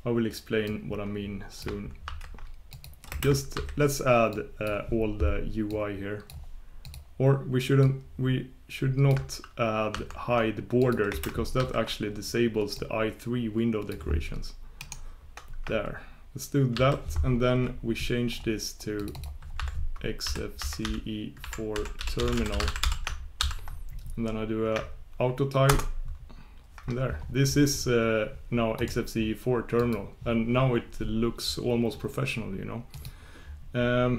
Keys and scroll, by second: 25.7 ctrl+super+Return, 26.0 ctrl+super+Return.